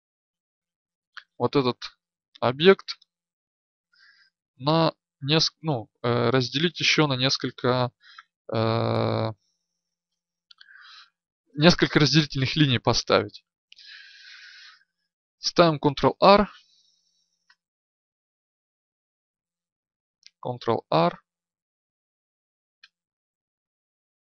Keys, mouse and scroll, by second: 14.5 ctrl+r, 20.2 ctrl+r.